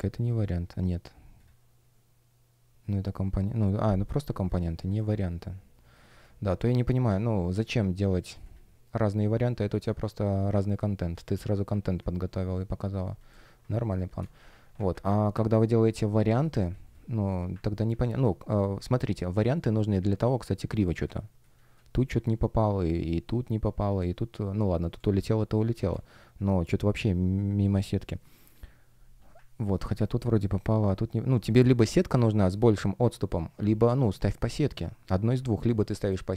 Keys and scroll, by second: 6.0 space, 10.6 space, 13.6 space, 14.9 super+\, 16.0 space, 18.4 shift+o, 19.4 shift+o, 21.0 space, 22.0 F1, 24.9 space, 36.0 space.